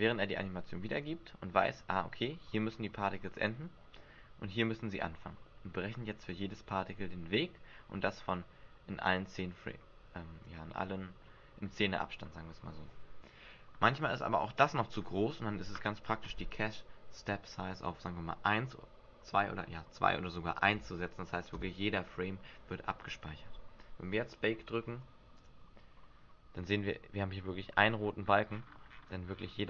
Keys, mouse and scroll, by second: 14.8 click, 17.4 click, 25.3 click, 27.8-29.6 scroll up 37.